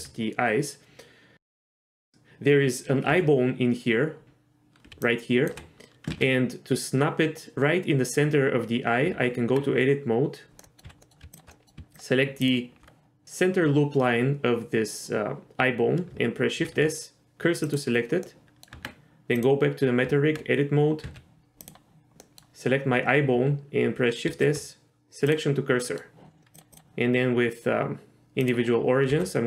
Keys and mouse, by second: 3.1 z, 4.2 ctrl+z, 5.0-5.5 drag, 5.0 d, 5.4 d, 5.5 d, 5.5 d, 6.1 ctrl+z, 9.1 Tab, 10.6 middle click, 10.8 z, 11.0 middle click, 11.5 middle click, 16.6 shift+s, 18.2 middle click, 18.7 Tab, 19.4 click, 20.0 Tab, 21.0 z, 22.2 middle click, 24.3 shift+s, 25.8 middle click, 26.8-28.5 drag, 29.1 s.